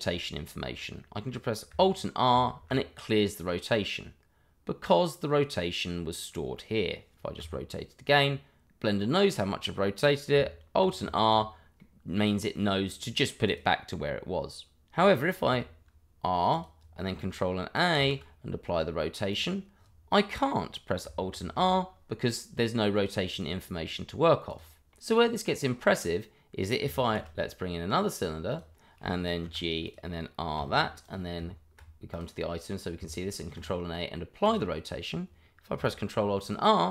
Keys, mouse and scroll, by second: 2.3 alt+r, 7.4 r, 8.0 click, 10.8 alt+r, 11.8 middle click, 12.2 middle click, 13.5 click, 14.9-15.5 scroll up 1, 15.5 r, 16.5 click, 18.0 ctrl+a, 19.3 click, 21.4 alt+r, 23.0 scroll down 1, 23.3 click, 23.8 middle click, 24.5 click, 24.9 middle click, 25.0 Delete, 27.0 shift+a, 28.5 click, 29.8 click, 30.5 r, 31.0 click, 33.3 ctrl+a, 34.4 click.